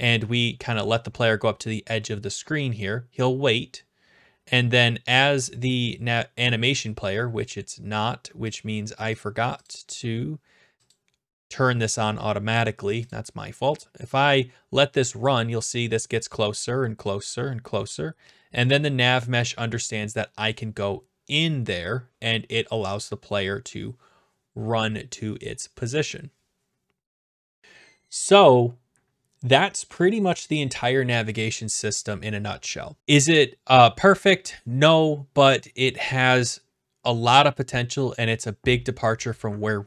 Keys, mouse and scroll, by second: 6.4-7.6 scroll down 4, 8.5 click, 9.2 click, 9.8 click, 10.9 click, 13.1 click.